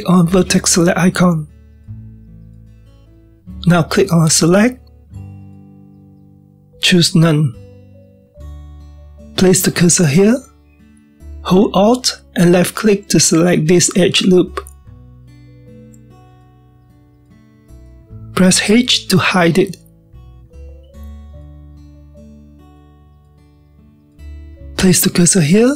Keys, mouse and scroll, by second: 0.4-2.2 scroll up 1, 2.2 click, 5.4-8.5 drag, 8.8-12.1 scroll up 2, 13.2 alt+click, 14.8-21.2 middle drag, 21.2 h, 21.9-25.5 shift+middle drag.